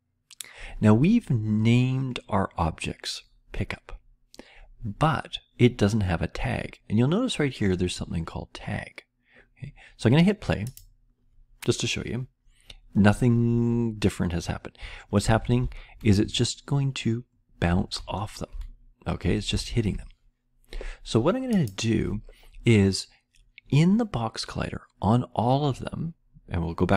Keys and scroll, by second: 14.7 Down, 15.3 Down, 15.4 Right, 16.2 Up, 16.2-17.7 Left, 17.7 Right, 18.4 Right, 19.0 Right, 19.0 Up.